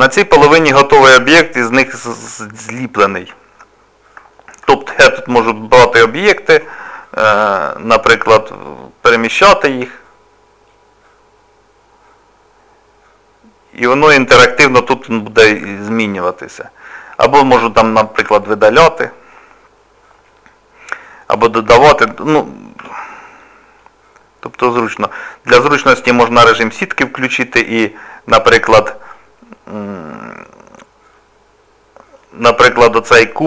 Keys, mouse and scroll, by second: 0.0 click, 0.5 middle click, 2.5 shift+middle click, 3.6 middle click, 4.3 middle click, 5.0 click, 7.3 t, 8.6 click, 15.5 middle click, 18.4 Delete, 20.3 middle click, 22.8 t, 23.4 scroll up 2, 23.8 middle click, 25.5 z, 26.2 middle click, 27.2 click, 28.1 middle click, 32.7 click.